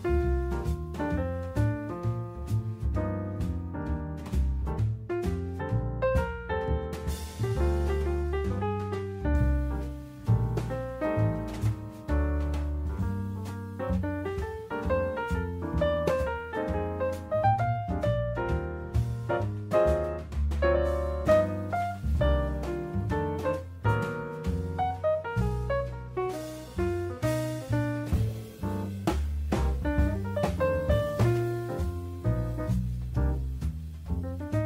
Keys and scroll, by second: 4.1 Escape, 8.9 Escape, 22.7 Escape, 25.4 Escape, 31.2 Escape, 33.2 0.